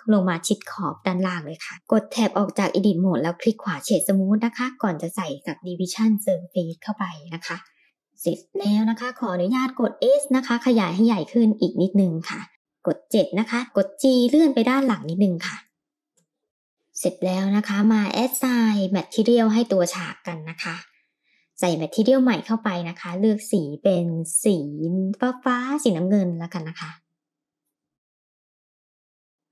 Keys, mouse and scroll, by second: 0.3 middle click, 0.9 click, 1.3 Tab, 1.7 click, 2.0-3.6 right drag, 3.6-6.5 drag, 7.7 click, 8.1-8.9 middle drag, 9.6 s, 11.8 KP_3, 12.6 shift+middle click, 12.6 KP_7, 13.7 g, 16.7-19.8 middle drag, 21.1 click, 22.0 click, 22.9 click, 29.2 middle click.